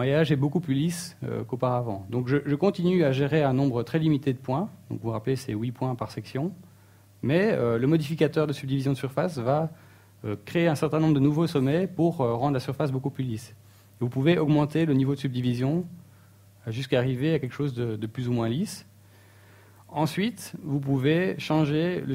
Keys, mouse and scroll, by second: 3.4 shift+middle click, 3.8-4.4 scroll up 1, 4.4 scroll up 2, 4.5 shift+middle click, 21.9 click.